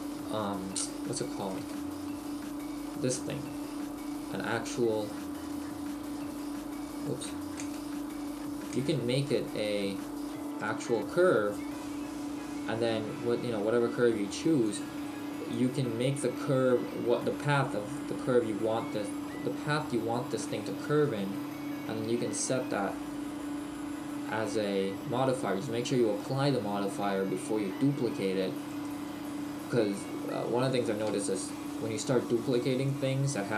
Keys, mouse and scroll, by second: 1.6 space, 7.1 right click, 7.3 Tab, 7.7 space, 9.3 space, 18.6-19.0 scroll down 1, 20.6 middle click, 23.6-25.3 scroll up 1, 25.3-26.3 scroll up 1, 26.3 middle click, 28.8 middle click, 28.8 right click.